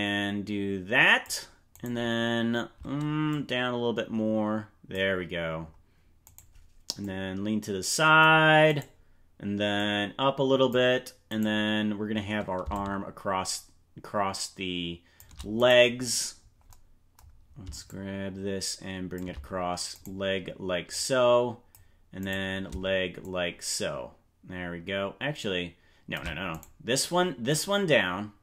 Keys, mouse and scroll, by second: 1.9 right click, 3.2-4.9 drag, 6.3 right click, 6.9-8.2 drag, 8.9 right click, 9.7-10.7 drag, 11.5 right click, 12.7-15.2 shift+drag, 15.7 right click, 17.8-19.1 shift+drag, 20.1 right click, 20.8 click, 22.3 right click, 23.1-26.1 shift+drag, 26.7 right click, 27.4-28.4 drag.